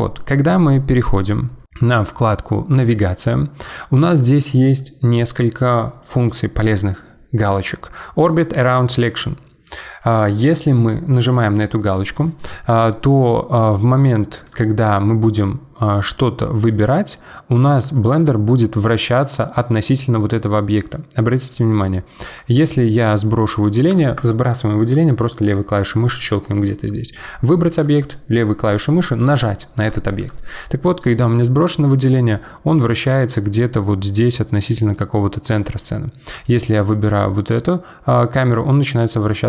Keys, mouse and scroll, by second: 14.4 click, 15.8-18.2 middle drag, 18.2 click, 18.5-21.5 middle drag, 21.7 click, 22.3 click, 22.6 click, 23.0 click, 23.6 drag, 23.9 click, 24.1 click, 24.4 click, 24.8 click, 25.0 click, 25.2 click, 25.3 click, 27.7 click, 30.2 click, 31.0 click, 31.3-36.3 middle drag, 36.3 click, 36.9-39.4 middle drag.